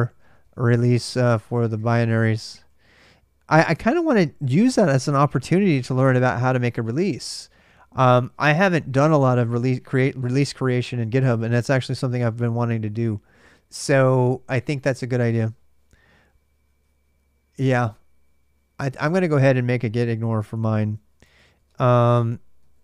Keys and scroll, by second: 0.0-5.0 typing, 19.8-22.8 typing.